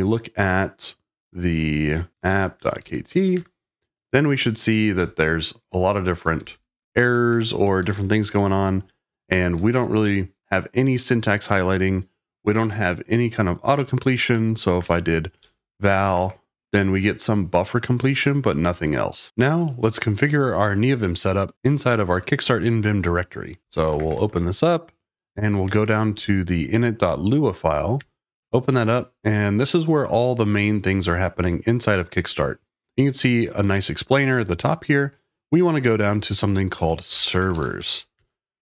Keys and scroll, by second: 1.9-3.5 typing, 4.9-10.0 typing, 14.0-16.2 typing, 23.4-26.1 typing, 27.9 Return, 33.9 ctrl+d, 34.3 ctrl+d, 34.6 ctrl+d, 36.4-38.6 typing.